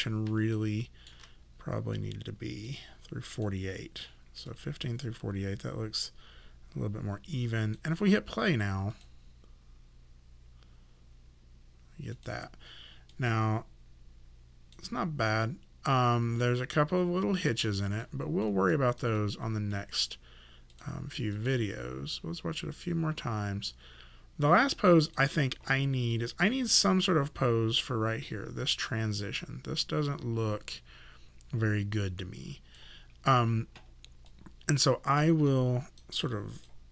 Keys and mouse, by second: 0.5 shift+middle click, 2.0 click, 8.9 click, 12.1 click, 15.9 click, 18.0 alt+click, 18.7 alt+right click, 19.2 alt+click, 25.0 click, 34.3 alt+click, 35.5 alt+right click, 36.3 alt+click.